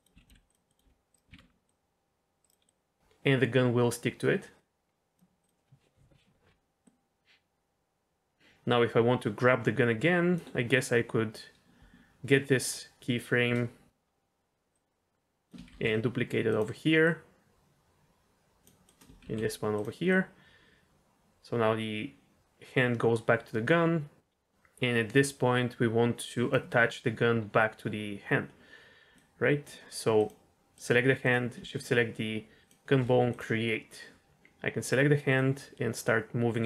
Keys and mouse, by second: 0.1 r, 0.2 click, 0.3 g, 0.7 click, 0.8 r, 1.3 alt+r, 1.6-2.4 drag, 2.6-5.1 drag, 5.4 click, 6.8-10.3 drag, 10.7-11.3 drag, 14.7-15.5 drag, 15.7 shift+d, 17.0-18.6 drag, 18.8 click, 19.2 shift+d, 19.7 drag, 20.0-26.5 drag, 29.1 click, 30.1 click, 32.6 shift+click, 33.3 click, 35.3-36.6 drag.